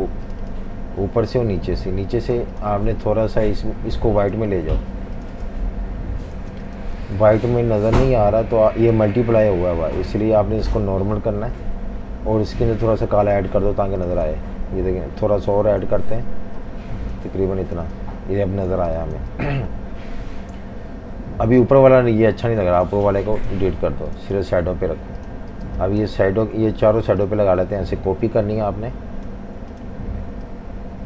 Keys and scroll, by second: 6.4 v, 6.5 space, 7.3 super+z, 15.6 super+z, 18.7 v, 18.9 space, 23.9 Delete, 25.6 space.